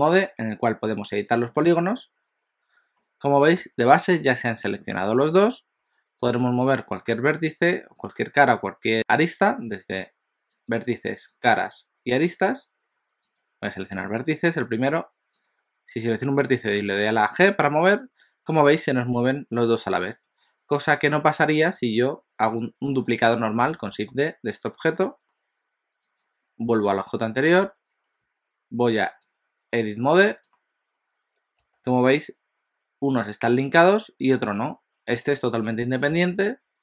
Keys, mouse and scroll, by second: 2.9 middle click, 3.9-5.9 scroll up 1, 6.2 click, 10.6 click, 11.3 click, 12.2 click, 13.2 click, 15.4 click, 17.1 g, 20.9 Tab, 21.7 click, 22.5 middle click, 23.7 shift+d, 26.0 click, 29.2 click, 31.6 g.